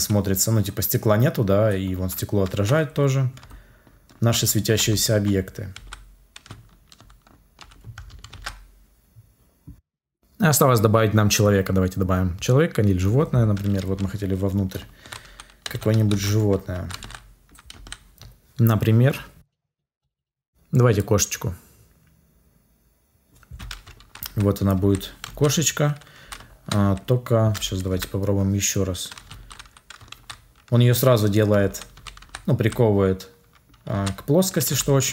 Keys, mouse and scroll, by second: 8.2 ctrl+s, 27.8 Delete.